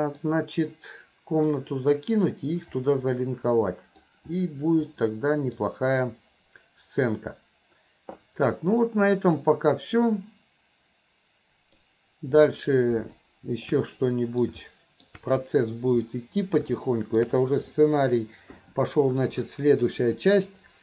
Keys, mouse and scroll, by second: 2.9-4.0 middle drag, 5.0-5.6 middle drag, 8.9-11.8 middle drag, 13.2 middle click, 14.0 middle click, 14.7 middle click, 16.9 middle click.